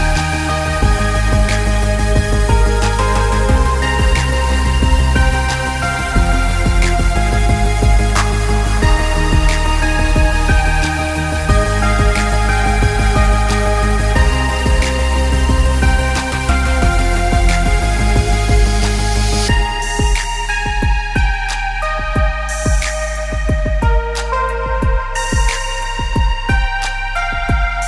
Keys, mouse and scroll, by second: 0.0 click, 1.0 click, 5.8 click, 7.4 alt+shift+click, 8.0 click, 9.5 click, 11.0 click, 12.2 click, 15.8 click, 17.0-17.5 scroll down 1, 18.2 click, 20.2 Down, 21.8 click, 27.2 shift+click.